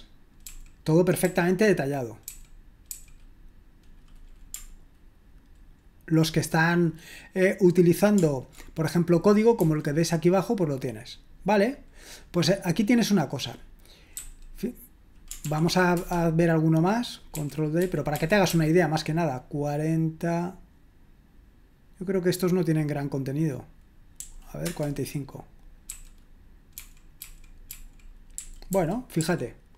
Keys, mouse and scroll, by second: 0.0-1.2 typing, 2.2-2.8 typing, 9.6 j, 14.1 q, 15.4 ctrl+p, 16.0 Return, 17.3-18.4 typing, 24.2-24.6 typing, 25.9-29.2 typing.